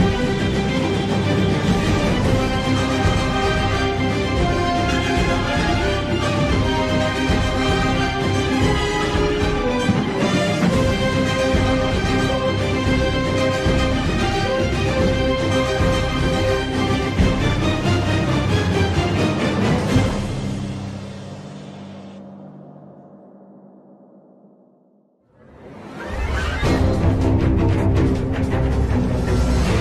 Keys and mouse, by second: 0.6 g, 6.5-7.7 drag, 8.9 g, 12.3-13.9 drag, 14.8-16.1 drag, 17.6 g, 20.6 click, 22.4 click, 23.9 g, 27.3 z, 28.5 middle click.